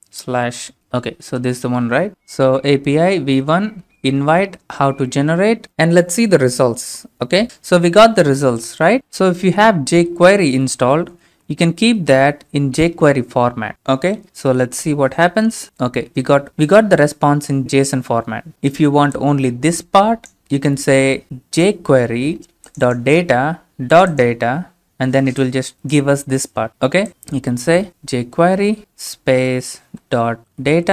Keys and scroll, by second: 0.0-2.7 typing, 4.2 BackSpace, 4.6-5.5 Right, 7.4 Return, 10.6 shift+Tab, 11.0 typing, 11.2 Tab, 12.0-12.8 typing, 14.8 Return, 28.9 Tab, 30.2-30.9 typing.